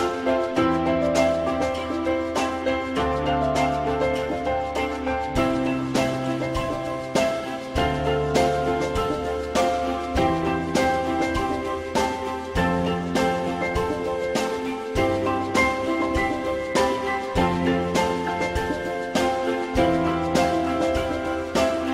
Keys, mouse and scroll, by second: 0.9 alt+middle click, 3.4 alt+middle click, 4.3 F4, 4.9 alt+middle click, 5.1 alt+middle click, 6.9 alt+middle click, 8.9 alt+middle click, 12.9 alt+double middle click, 14.7 alt+middle click, 16.4 ctrl+click, 18.3 ctrl+click.